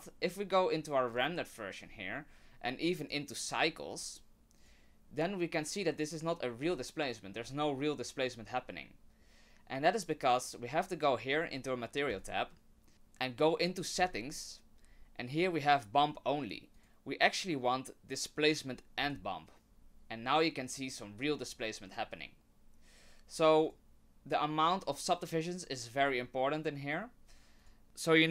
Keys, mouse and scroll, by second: 1.1 click, 3.0 click, 3.4 click, 3.9 click, 6.6 scroll up 3, 9.2-9.8 scroll down 1, 12.1 click, 14.0 click, 14.7-16.5 scroll down 4, 16.7 click, 23.6 click, 26.0 click, 27.6 click.